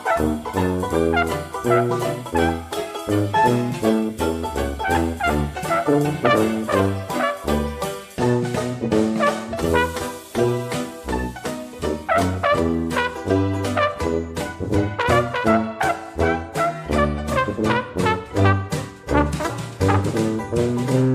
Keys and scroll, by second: 4.0-4.6 typing, 7.9 typing, 16.2 ctrl+g.